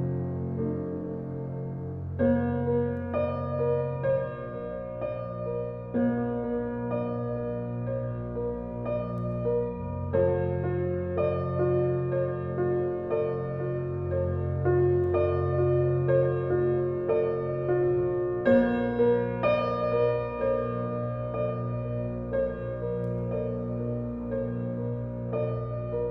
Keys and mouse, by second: 0.1 click, 1.0 KP_2, 1.2 KP_4, 1.5 Return, 2.8 Tab, 3.9 s, 6.8 click, 7.9 ctrl+alt+click, 8.6 ctrl+alt+1, 9.1-10.3 ctrl+alt+drag, 10.7-12.4 ctrl+alt+shift+drag, 11.8 typing, 13.2-14.3 ctrl+alt+drag, 14.1-14.4 typing, 15.1 click, 15.8-16.2 typing, 17.1 click, 17.9 typing, 20.0-21.1 drag, 21.7-22.9 ctrl+alt+drag, 23.2-23.5 typing, 24.2-26.1 drag.